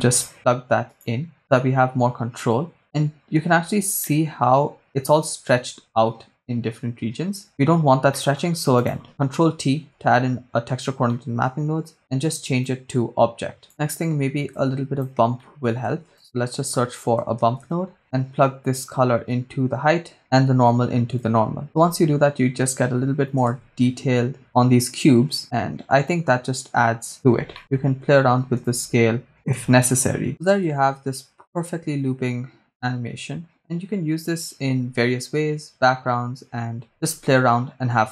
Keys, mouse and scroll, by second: 2.6 click, 3.5-4.1 scroll up 3, 4.2 shift+middle click, 4.7-5.8 scroll up 2, 5.8 scroll down 3, 7.9 scroll down 1, 8.1 middle click, 8.4-8.8 scroll up 1, 8.8 click, 9.4 ctrl+t, 10.5-11.2 scroll down 3, 11.2 middle click, 12.7-13.7 drag, 13.7 middle click, 13.9-14.5 scroll down 2, 14.5 click, 15.4 middle click, 15.8 shift+a, 18.4-20.2 drag, 21.2 click, 22.6 middle click, 22.6-23.0 scroll down 3, 23.6 shift+space, 26.5-27.4 scroll up 5, 27.6 middle click, 27.7 scroll up 2, 28.6 shift+click, 30.3 scroll down 3, 30.3 shift+space, 30.7 shift+space, 36.9 shift+space.